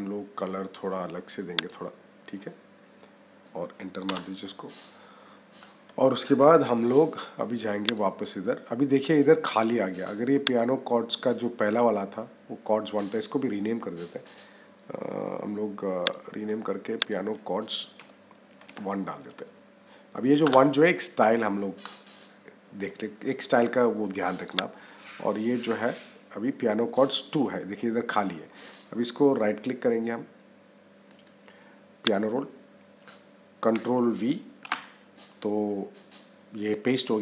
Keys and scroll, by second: 3.9 Return, 17.8 -, 20.3 Return.